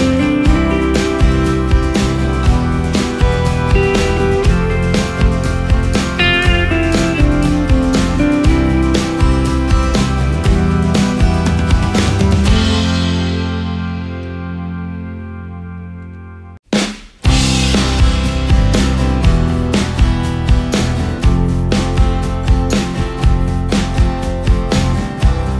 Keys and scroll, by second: 1.8 space, 3.6 ctrl+space, 8.0 ctrl+g, 8.5 ctrl+space, 10.7 ctrl+g, 11.2 ctrl+space, 15.0 space, 16.6 Up, 16.9 Up, 17.7 ctrl+space, 19.2 ctrl+alt+space, 21.4 ctrl+alt+shift+space.